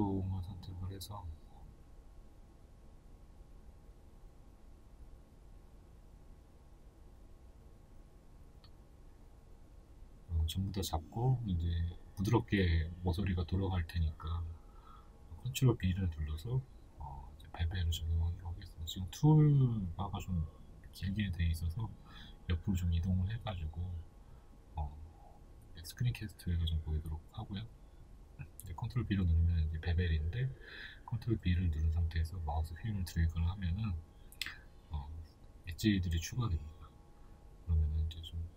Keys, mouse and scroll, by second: 6.2 KP_Decimal, 7.7-8.0 scroll down 2, 8.5 b, 10.9 ctrl+b, 15.5 right click, 16.4 ctrl+z, 24.1 click, 24.2-31.9 middle drag, 25.1 scroll up 2, 25.6-25.9 scroll down 2, 25.9 a, 27.7 ctrl+b, 35.1 middle click, 36.0 Tab, 36.4 middle click, 37.4-38.5 middle drag, 37.4 scroll up 1, 37.7-38.1 scroll down 1.